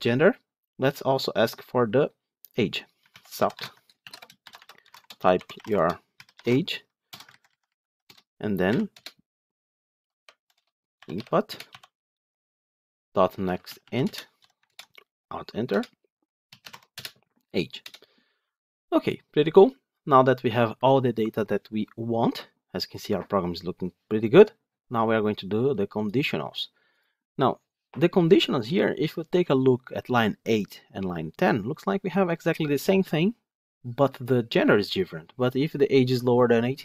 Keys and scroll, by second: 3.5 Tab, 11.4 Return, 14.5 alt+Return.